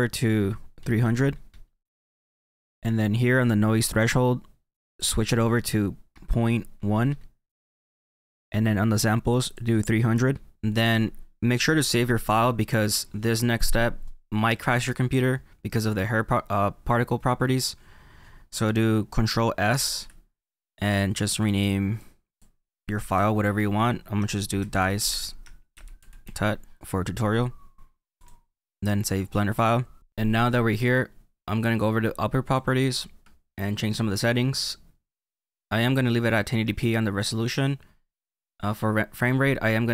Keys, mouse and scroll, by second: 1.1 KP_0, 4.5-5.7 drag, 5.7 KP_0, 7.6-13.3 drag, 19.7 ctrl+s, 32.4-35.4 drag.